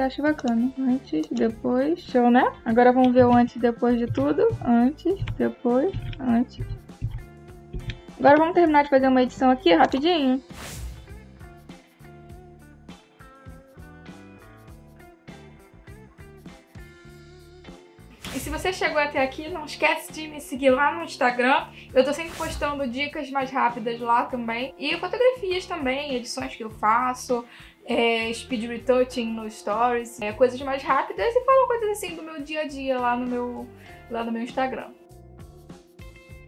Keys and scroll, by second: 3.1 \, 11.0 space, 11.4 space, 12.6-14.5 typing, 18.0 space.